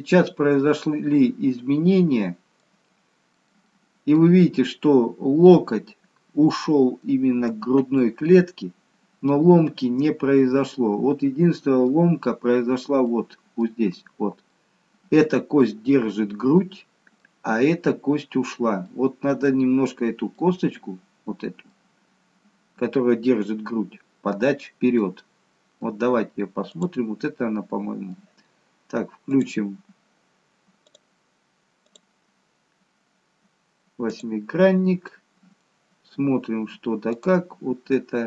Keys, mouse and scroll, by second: 3.0-3.8 scroll up 2, 3.8 middle click, 7.0 middle click, 7.9 middle click, 13.0 middle click, 14.4 middle click, 16.5 middle click, 16.5-17.5 scroll up 1, 18.8 middle click, 21.5 middle click, 24.9 middle click, 26.7 click, 27.6 middle click, 29.3 click, 32.4 click, 35.1 middle click, 37.1 click, 38.0 middle click.